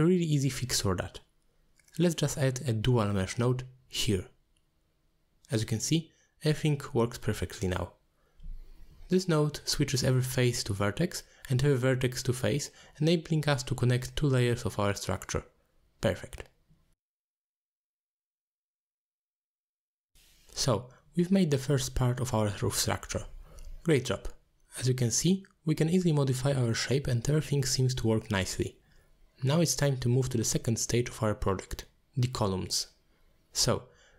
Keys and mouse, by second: 4.3 click, 6.0-6.7 middle drag, 7.6 click, 8.3-9.0 middle drag, 9.6 middle drag, 10.8 alt+shift+click, 11.6 drag, 11.9 z, 13.3 click, 13.7 click, 13.8 n, 13.8 m, 14.1 m, 15.5 click, 15.7 m, 15.8 m, 16.0 m, 17.7 click, 18.4 middle drag, 18.7 z, 19.4 middle drag, 22.8-26.5 drag, 27.9 click, 28.4 middle click.